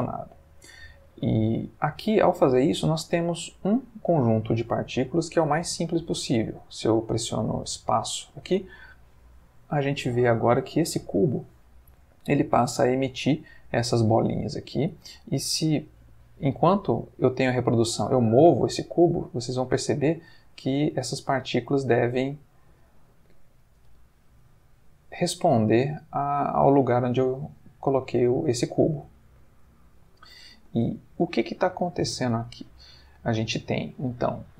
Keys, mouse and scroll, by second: 1.3-2.5 middle drag, 8.2 space, 9.7-12.1 middle drag, 12.6-13.4 middle drag, 13.4-13.8 scroll up 1, 13.8-14.5 middle drag, 15.2-16.7 ctrl+scroll up 1, 16.7-18.0 scroll up 1, 18.1 g, 20.5 click, 22.3 g, 22.8 click, 23.9 g, 24.4 click, 25.6 g, 26.0 click, 27.0 g, 27.3 click, 29.0 Escape, 30.1-30.7 middle drag, 30.8-31.6 ctrl+middle drag, 31.7-32.3 ctrl+shift+middle drag, 32.5-33.1 ctrl+shift+middle drag.